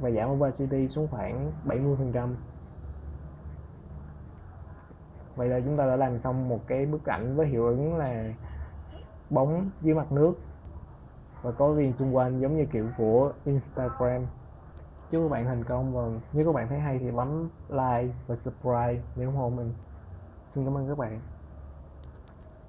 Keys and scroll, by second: 1.1 7, 1.4 0, 1.7 Return, 13.6 ctrl+0.